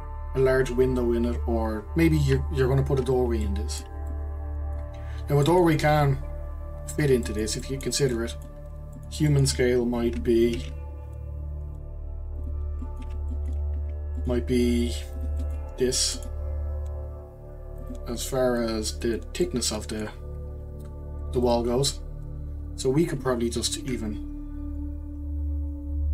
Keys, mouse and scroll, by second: 3.4-10.5 shift+middle drag, 10.5 shift+a, 12.8-13.8 middle drag, 13.8 s, 15.4-15.8 middle drag, 15.8 s, 18.6 click, 19.4-21.4 middle drag, 21.4 click, 21.9-23.8 scroll up 1, 23.8 ctrl+r, 24.3-24.8 scroll up 1, 24.8-26.1 scroll down 2.